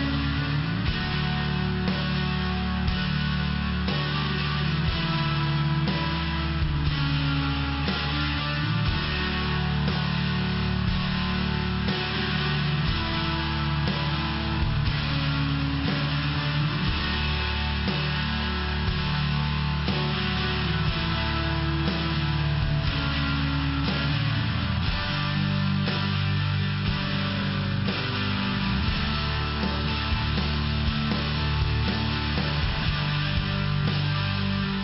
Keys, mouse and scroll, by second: 2.1 click, 3.5 click, 4.5 click, 5.9 click, 6.9 click, 7.6 click, 7.7 click, 8.9 click, 11.1 click, 12.7 click, 14.6 click, 16.1 click, 17.3 click, 18.5 click, 19.3 click, 19.5 click, 20.4 click, 22.3 click, 24.4 click, 26.3 click, 30.3 click, 31.4 click, 34.3 click.